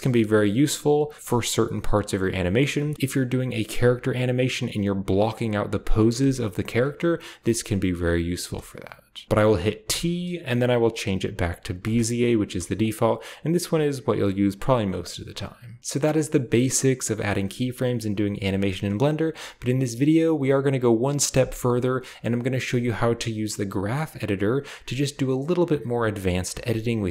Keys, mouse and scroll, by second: 1.1-3.2 drag, 1.1 space, 6.8 space, 7.1-8.1 drag, 8.3-9.2 drag, 9.2 t, 9.7 t, 11.6 click, 11.8 click, 12.3-13.1 typing, 12.7 click, 14.1 click, 15.8 space, 19.0 space, 21.9-24.8 drag, 26.1 space.